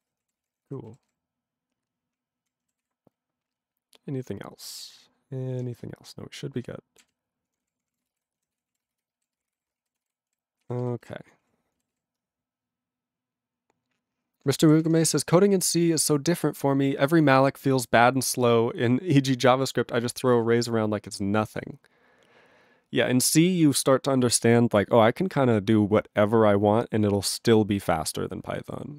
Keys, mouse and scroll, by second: 0.0 ctrl+e, 0.1 ctrl+n, 0.2 ctrl+p, 0.3 ctrl+space, 0.4 ctrl+n, 0.5 ctrl+e, 0.6 ctrl+g, 1.1 ctrl+s, 1.6-2.5 ctrl+p, 2.8 ctrl+s, 3.1-4.2 ctrl+n, 4.2-5.6 ctrl+p, 5.6-7.0 ctrl+n, 7.0 ctrl+e, 7.5 ctrl+p, 7.6 ctrl+p, 7.8 ctrl+p, 7.9 ctrl+p, 8.0 ctrl+a, 8.0 ctrl+space, 8.1 ctrl+e, 8.1 ctrl+g, 8.5 ctrl+s, 8.7 ctrl+a, 9.1 alt+f, 9.2-10.0 typing, 10.8 ctrl+s, 11.0 ctrl+g, 11.4 ctrl+a, 11.9 ctrl+s, 14.8 ctrl+s.